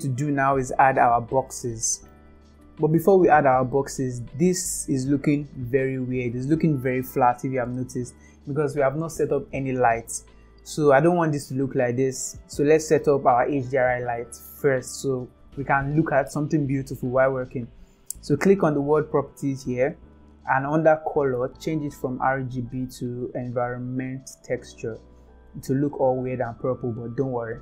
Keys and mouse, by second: 1.8 middle drag, 18.9 click, 22.0-24.4 drag.